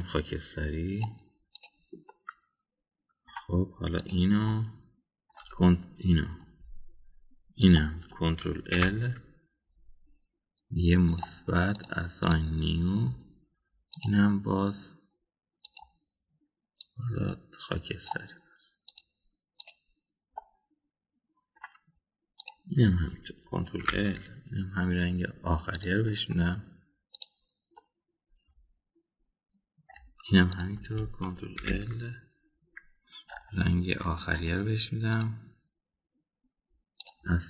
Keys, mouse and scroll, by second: 2.5 click, 3.0-4.2 middle drag, 5.0 click, 5.5 middle click, 8.6 shift+click, 9.8 ctrl+l, 12.0 drag, 12.7 drag, 13.2 click, 14.9 click, 20.5 click, 21.4-22.5 middle drag, 23.4 click, 24.8 ctrl+l, 26.8 click, 28.2 click, 28.7-30.9 middle drag, 31.5 click, 32.6 ctrl+l, 36.1 click.